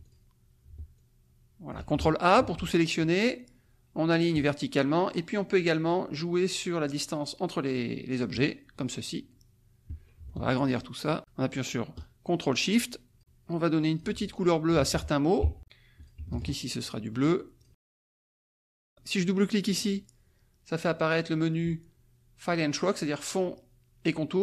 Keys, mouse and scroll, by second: 1.0 ctrl+click, 2.4 ctrl+a, 4.3 click, 8.3 click, 10.8-15.4 ctrl+shift+drag, 16.0 shift+click, 16.3 shift+click, 17.6 shift+click, 17.9 shift+click, 18.4 click, 19.6 click.